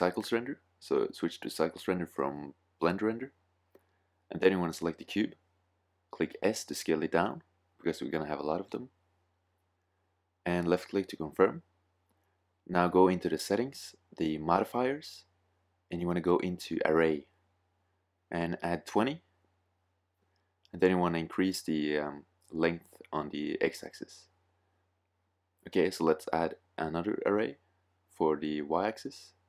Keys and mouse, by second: 3.7 click, 6.7 s, 16.6-17.7 middle drag, 19.4-21.3 middle drag, 22.4 click, 28.4-29.4 middle drag.